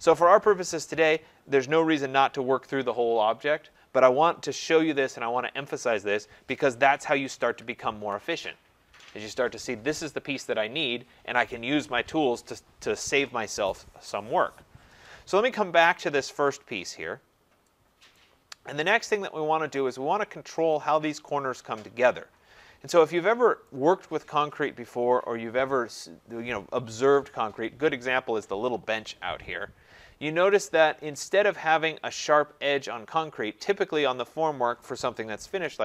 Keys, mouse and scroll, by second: 1.6 middle click, 6.0 middle click, 6.1 click, 7.1 ctrl+z, 7.6 ctrl+z, 15.6 scroll, 16.3-17.0 scroll, 18.1 right click, 19.0 middle click, 19.2 middle click, 19.3 middle click, 22.7 middle click, 22.8 middle click, 23.7 right click, 24.3-27.8 scroll, 31.4 scroll, 32.1 scroll.